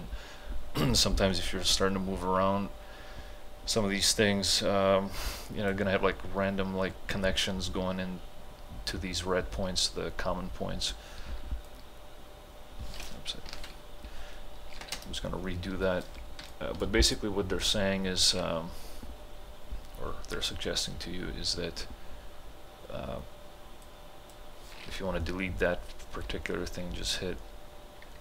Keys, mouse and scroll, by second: 1.7-8.2 drag, 11.3 t, 11.7-13.6 drag, 13.6 ctrl+z, 14.8 ctrl+h, 15.0 space, 16.5-20.7 ctrl+alt+drag, 23.9-26.9 drag.